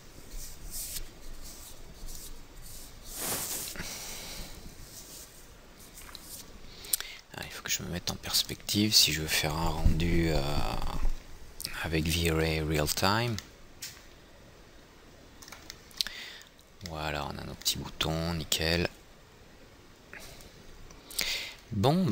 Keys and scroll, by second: 7.8 p.